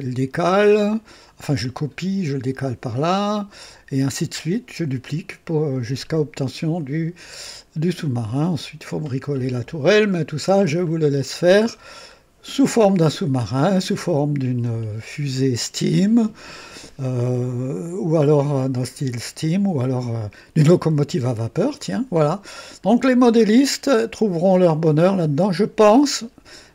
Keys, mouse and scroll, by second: 6.0 scroll up 1, 6.8-7.6 right drag, 9.6 scroll down 1, 10.1-10.4 scroll up 1, 10.8-11.4 right drag, 11.6 scroll down 1, 13.0-14.3 drag, 14.6 click, 17.6-18.5 right drag, 20.1-22.3 drag, 23.0 scroll down 1, 23.6 right click, 24.5 click, 26.1 scroll up 1.